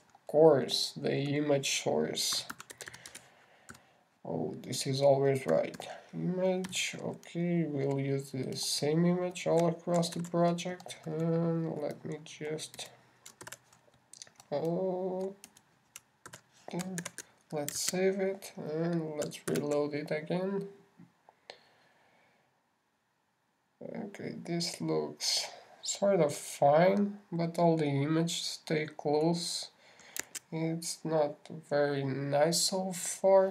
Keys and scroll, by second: 9.5 shift+Left, 11.5 shift+super+c, 12.1 super+c, 12.2 super+Down, 14.7 super+Left, 14.8 super+v, 15.4 super+Down, 17.4 super+Left, 17.7 super+v, 18.4 super+s, 19.1 super+Tab, 20.9 super+r, 31.6 super+Tab.